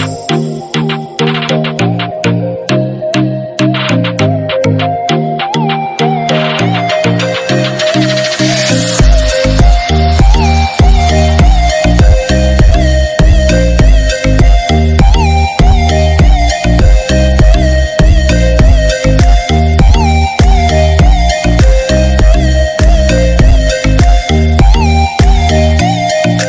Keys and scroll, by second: 2.9 ctrl+-, 23.7 ctrl+z.